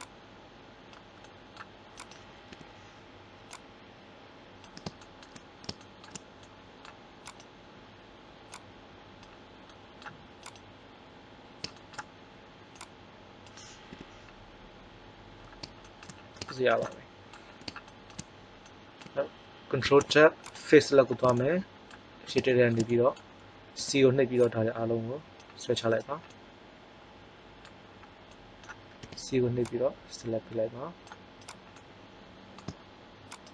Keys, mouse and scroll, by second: 2.4 KP_3, 3.4-4.4 drag, 7.3-8.5 right drag, 8.4 click, 9.7 middle click, 10.4-11.8 right drag, 11.9 right click, 12.8-13.8 drag, 13.8 KP_3, 15.2 middle click, 19.8 ctrl+Tab, 23.7 c, 29.0 c, 33.3 right click.